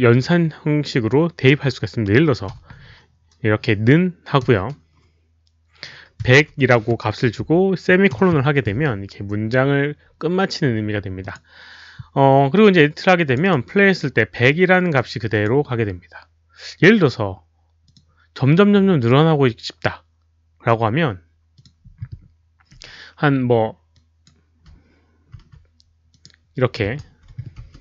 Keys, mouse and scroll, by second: 4.4 click, 4.4 space, 6.2-7.6 typing, 11.2 click, 13.2 click, 13.4 click, 14.3 click, 15.3 click, 16.6-17.3 typing, 16.8 click, 17.8 click, 21.5 click, 23.9 click, 25.5 ctrl+c, 25.5 click, 26.1 click, 27.0 ctrl+v, 27.6 space.